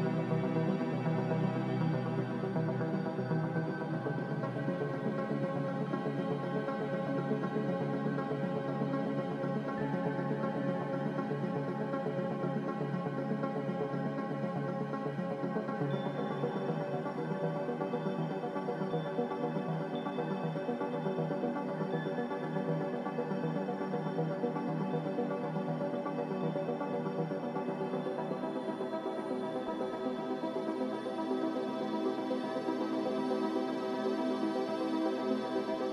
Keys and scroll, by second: 3.5 ctrl+c, 7.1 g, 7.7 z, 11.0 g, 13.2 c, 19.3 z, 19.9 Delete, 22.7 a, 23.2 ctrl+c, 27.2 Delete.